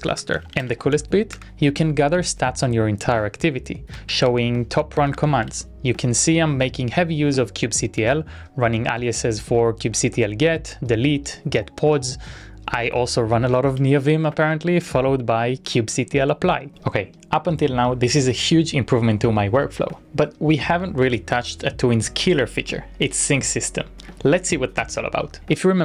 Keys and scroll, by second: 0.0-1.4 typing, 1.5 Return, 4.0-5.7 typing, 9.8 typing, 11.8 typing, 13.8 typing.